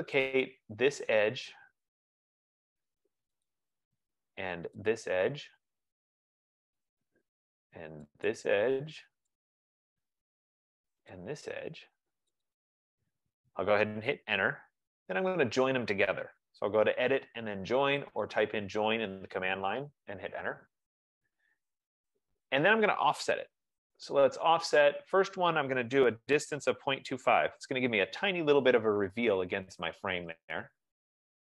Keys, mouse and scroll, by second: 0.6 click, 3.7 click, 5.0 click, 6.3 click, 8.5 click, 9.6 click, 11.3 click, 12.7 click, 14.4 Return, 17.7-18.9 typing, 17.8 click, 20.4 Return, 23.5-24.8 typing, 25.9-28.3 typing, 30.0 scroll, 31.1 click.